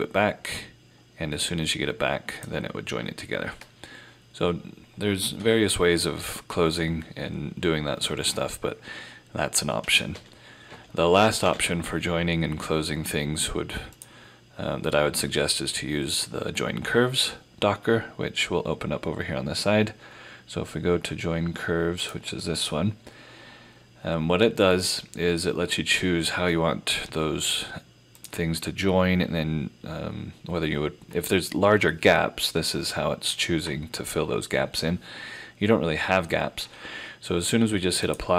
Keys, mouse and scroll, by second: 9.8 F4, 10.1 ctrl+z, 10.7 ctrl+z, 11.5 ctrl+z, 14.0 click, 22.0 click, 28.2 click, 38.1 click.